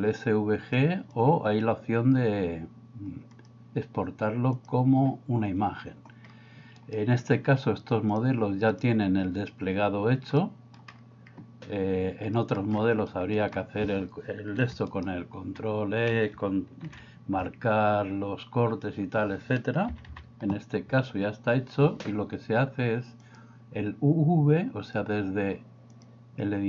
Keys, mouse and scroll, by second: 0.8 click, 3.5-4.6 drag, 8.1 click, 10.3 middle click, 12.4 middle click, 13.1 middle click, 16.8 ctrl+e, 19.9 a, 20.1 a, 23.2 click, 26.1-26.6 drag.